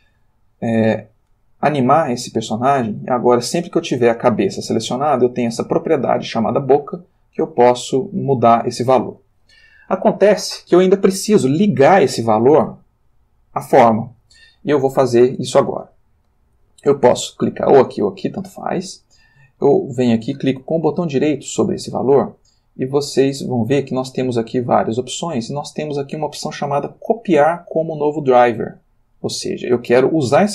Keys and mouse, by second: 1.0 click, 3.5 r, 4.8 Escape, 7.1 click, 8.3 click, 21.9 right click.